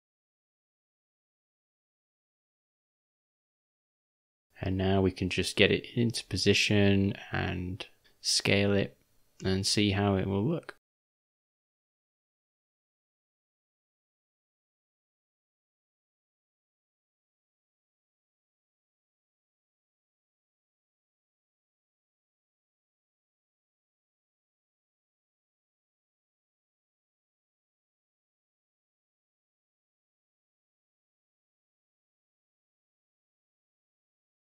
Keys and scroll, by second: 1.0 g, 3.8 s, 7.0 d, 7.4 s, 9.0 o, 9.1 r, 9.7 g, 14.7 shift+`, 21.1 s, 28.2 d, 29.4 u.